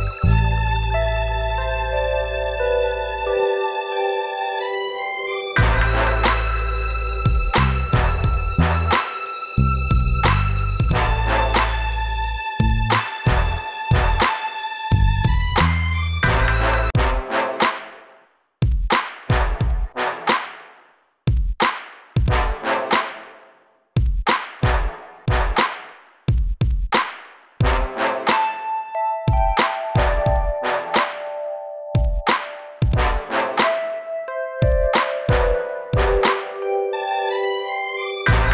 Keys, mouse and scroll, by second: 0.1 click, 1.1 click, 7.5 scroll down 1, 8.5 click, 8.6 click, 9.6 click, 10.6 click, 14.8 click, 14.8 click, 15.8 click, 18.3 click, 18.4 click, 19.8 click, 21.8 scroll up 2, 22.9 click, 25.4 click, 25.4 click, 26.4 click, 27.9 click, 28.6 click, 30.7 click, 32.0 click, 35.0 scroll down 2, 37.1 click, 37.2 click.